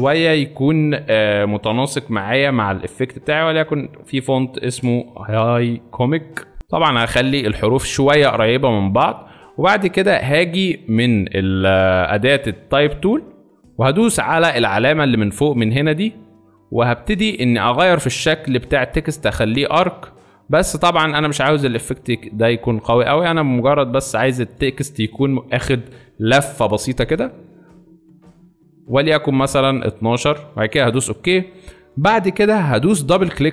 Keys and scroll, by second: 1.3 ctrl+a, 3.6 h, 3.8 e.